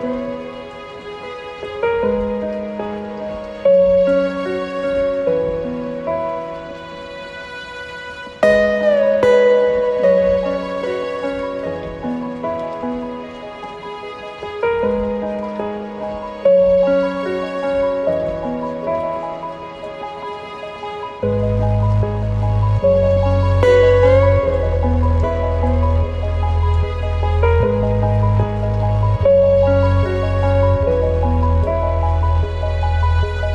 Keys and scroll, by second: 5.9 alt+BackSpace, 6.4 ctrl+d, 9.1 ctrl+t, 22.1 ctrl+t, 22.5 ctrl+space, 28.3 ctrl+t, 28.8 ctrl+alt+space, 31.4 ctrl+space.